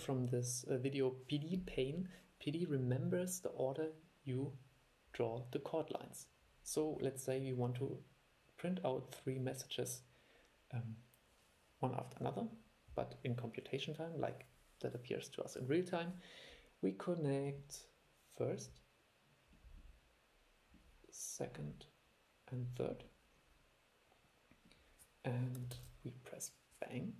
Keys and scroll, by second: 25.9 super+e.